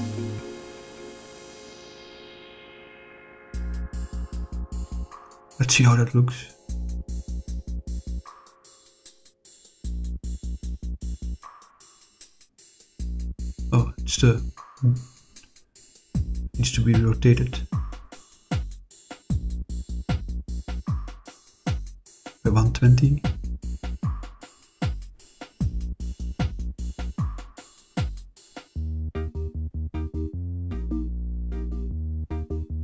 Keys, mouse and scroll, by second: 1.2 click, 1.8-5.6 drag, 7.1 click, 7.7-9.4 drag, 10.9 click, 11.7-14.0 middle drag, 16.7 click, 19.1 click, 19.5 click, 20.4 click, 20.8 click, 27.0 r, 27.3 1, 27.5 2, 27.8 0, 28.7 Return, 31.0 click, 31.5-32.7 drag.